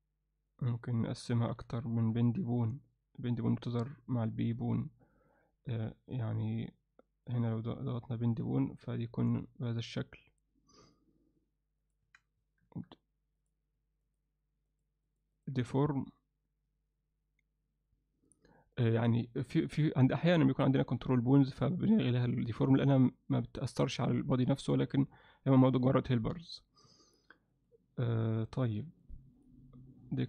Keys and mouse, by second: 0.5 click, 1.3-2.7 drag, 5.3 click, 7.3-8.4 drag, 10.9 click, 11.8-13.0 drag, 13.4 click, 14.1 click, 14.7 click, 15.1 click, 15.4 click, 19.6 click, 22.5 click, 26.4 click, 27.5 click, 28.1 click, 28.9 click, 29.4 click.